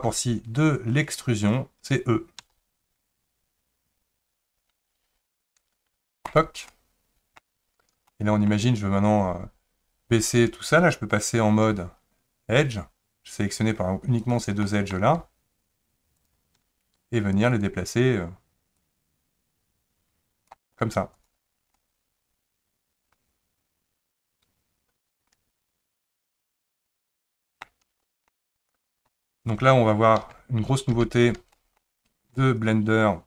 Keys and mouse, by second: 2.4 e, 6.7 middle click, 8.1 shift+middle click, 12.6 click, 14.3 click, 14.6 middle click, 16.2 shift+click, 17.6 click, 18.9-20.6 drag, 21.2 click, 21.7-27.6 middle drag, 28.0 shift+middle click, 30.2 ctrl+z, 30.9 ctrl+z, 31.5 shift+middle click, 32.4-33.2 middle drag.